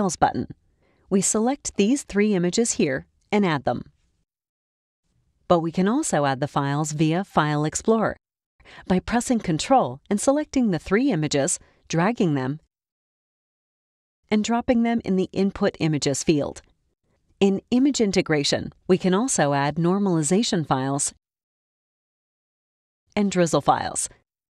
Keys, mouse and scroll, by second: 1.4 middle click, 1.5 click, 2.2 shift+middle click, 2.2 shift+click, 3.7 click, 5.7 click, 9.4 ctrl+click, 10.8 ctrl+click, 11.9-14.7 ctrl+drag, 16.9 middle click, 16.9 scroll up 2, 16.9 click, 19.8 click, 20.8 click, 21.5 shift+click, 22.3 click, 23.6 click, 24.3 shift+click.